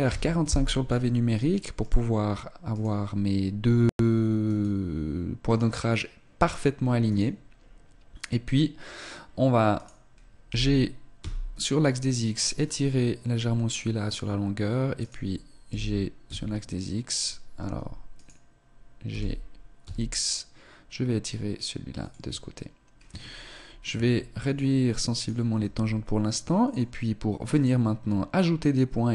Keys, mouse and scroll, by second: 0.9 scroll up 2, 1.5 right click, 2.8 right click, 4.4 right click, 5.4 right click, 9.7 right click, 10.4 g, 15.0 right click, 15.6 b, 18.1 right click, 19.0 g, 23.9 s, 25.1 right click, 25.6 s, 27.4 right click.